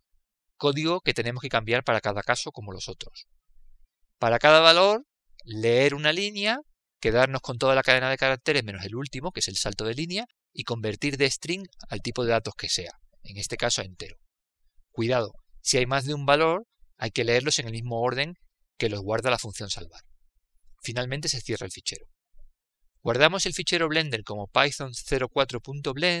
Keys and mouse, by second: 1.7 click, 8.0-11.6 drag, 14.1-17.9 drag, 22.7-26.2 drag, 22.7-24.3 middle drag.